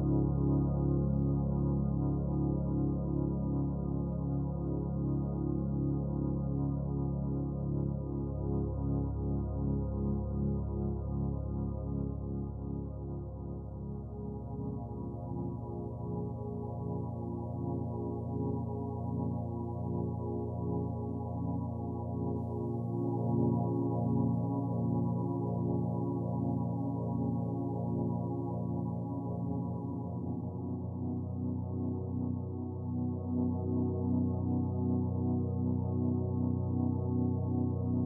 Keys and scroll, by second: 17.6 b.